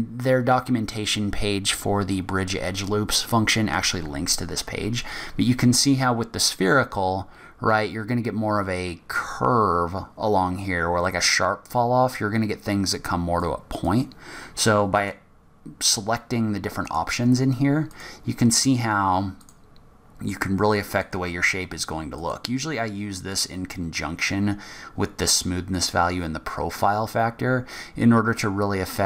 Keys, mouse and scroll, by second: 15.2 click, 18.1 click, 21.2 click, 23.5 click, 25.9 click.